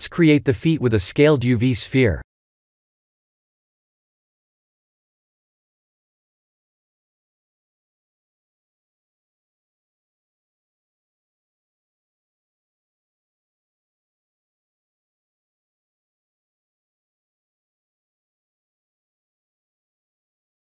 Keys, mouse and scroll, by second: 0.2 shift+a, 6.7 s, 8.8 g, 15.1 g.